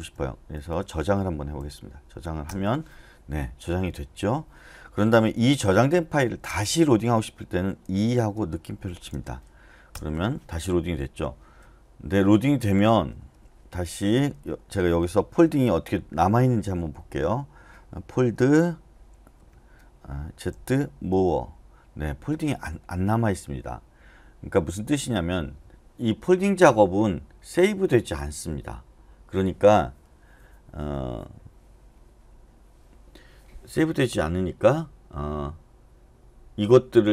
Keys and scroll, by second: 1.6 w, 2.4 Return, 6.4-8.8 typing, 9.9 Return, 11.8-14.3 typing, 18.2 f, 19.3 Escape, 20.5-22.5 typing.